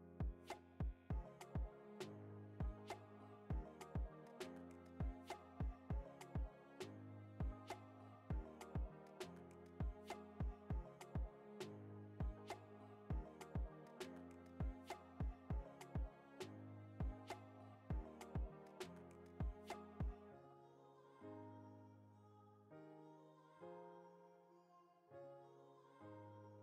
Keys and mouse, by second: 0.4 click, 0.9 alt+shift+click, 1.1 alt+shift+click, 1.8 e, 4.0 middle click, 4.6 shift+middle click, 5.2 ctrl+middle click, 5.7 ctrl+r, 7.5 ctrl+b, 10.0 click, 10.6 click, 11.2 middle click, 12.0 e, 14.1 ctrl+r, 19.1 click, 19.6 middle click, 19.9 e, 23.4 ctrl+r, 25.3 click, 25.7 alt+z, 26.4 click.